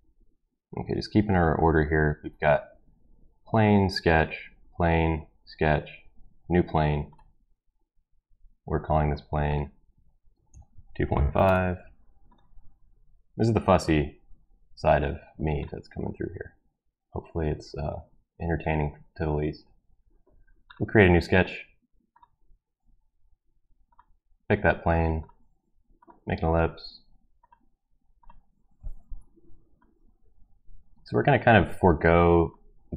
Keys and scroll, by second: 10.3 ctrl+v, 10.5-11.8 typing, 29.1 Escape.